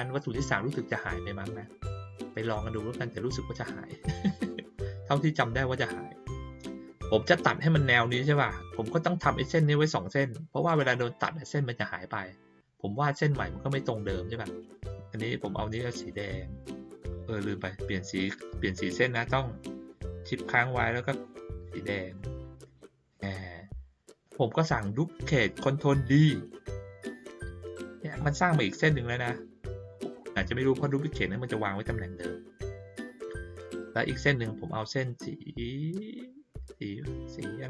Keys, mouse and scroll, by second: 2.5 click, 15.9 click, 22.1 shift+click.